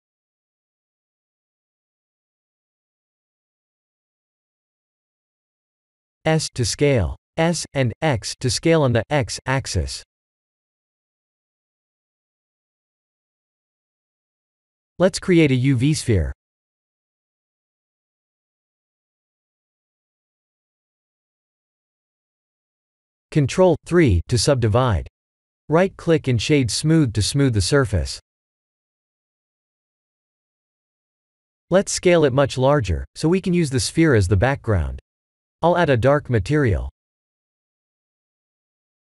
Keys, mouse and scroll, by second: 1.4 shift+a, 5.2 s, 8.5 s, 10.9 s, 13.1 middle click, 15.8 shift+a, 21.3 middle click, 22.3 middle click, 23.0 ctrl+3, 23.9 right click, 31.1-32.0 scroll up 11, 32.3 middle click, 33.7 click, 34.2-35.1 scroll down 4, 35.1-36.2 scroll down 7, 35.7 s, 37.3-38.5 scroll up 7.